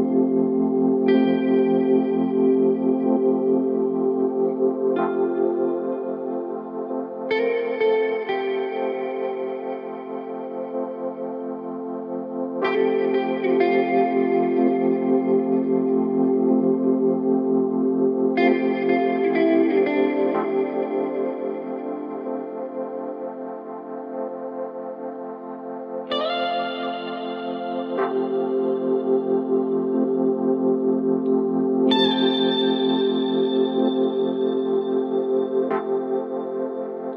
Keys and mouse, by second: 3.5-5.8 drag, 6.6-12.3 drag, 15.1 click, 19.0-25.0 drag, 26.7 click, 28.8-32.3 drag, 33.4 click, 34.6-37.0 middle drag.